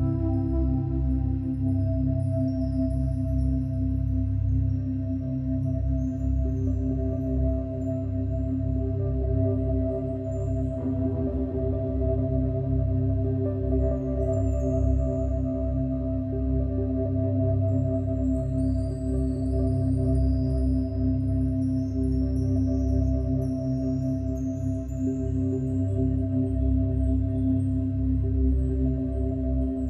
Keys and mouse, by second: 1.1 s, 2.4 Escape, 3.1 click, 4.3 s, 5.2 Escape, 6.2 click, 7.0 click, 7.6 click, 8.4 click, 9.9 click, 10.5 click, 11.8 g, 12.7 z, 14.9 click, 17.0 click, 17.8 click, 18.7 click, 20.8 click, 22.0 click, 22.6 click, 23.4 click, 24.5 s, 26.9 Escape, 27.4-28.3 drag.